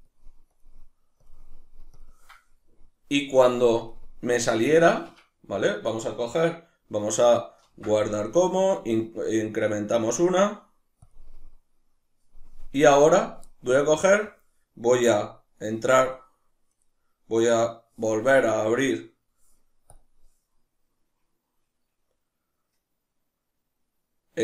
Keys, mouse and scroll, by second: 0.5 click, 2.0 click, 3.8 click, 5.2 Escape, 7.6 ctrl+s, 13.8-15.3 middle drag, 16.0-24.4 middle drag.